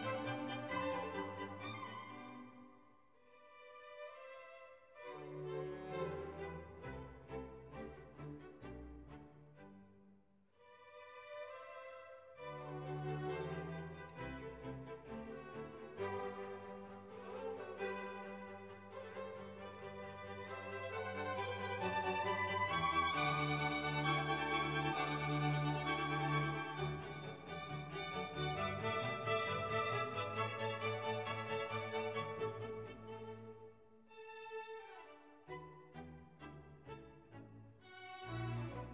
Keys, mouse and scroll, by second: 1.8 click, 3.7 click, 5.8 ctrl+shift+j, 10.6 click, 16.2 click, 19.4 click, 22.5 click, 23.6 click, 24.1-25.9 typing, 28.4 click, 30.4 click, 33.9-36.9 drag, 38.1-38.9 right drag.